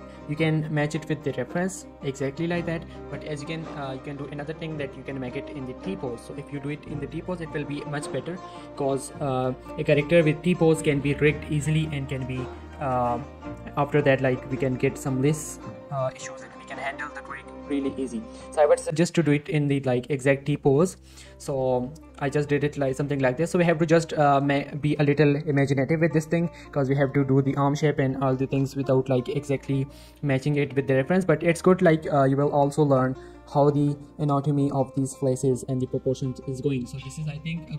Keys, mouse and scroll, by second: 0.2 scroll up 1, 2.2 g, 3.3 right click, 4.1 z, 4.4 z, 5.5 g, 5.8 z, 6.5 click, 9.3 click, 9.8-12.3 typing, 9.9 shift+middle click, 11.7 click, 14.0 shift+middle click, 14.4-15.6 typing, 14.7 right click, 19.1 g, 19.4 right click, 20.7 shift+middle click, 21.7 g, 22.2 right click, 22.3 z, 22.9 z, 23.1 shift+middle click, 23.2-24.4 shift+scroll up 2, 24.8 shift+middle click, 26.4 shift+middle click, 29.3 shift+middle click, 29.5 scroll down 1, 29.6 z, 30.1 z, 30.5 g, 30.8 x, 31.2 click, 31.8 shift+middle click, 32.0-33.7 scroll up 1, 37.1-37.5 scroll up 1, 37.5 scroll down 1, 37.6 z.